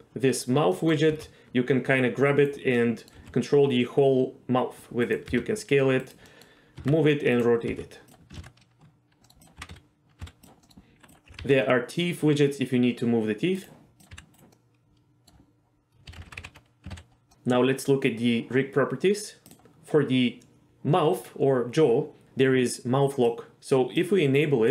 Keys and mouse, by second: 0.7 middle click, 1.1 g, 2.3 right click, 2.8-3.1 middle drag, 3.2 r, 5.0 right click, 5.3 s, 6.3 middle click, 6.8 r, 7.3-7.7 right drag, 7.7 g, 8.1 drag, 8.4 ctrl+z, 9.2 middle click, 9.6 r, 9.7 a, 10.2 x, 10.6 middle click, 11.3 g, 11.4 g, 13.6-14.0 right drag, 14.1 g, 14.3 right click, 14.5-15.3 middle drag, 16.1 a, 16.2 alt+r, 16.4 alt+g, 16.9 alt+s, 19.5 click, 23.3 click, 24.0-24.7 drag.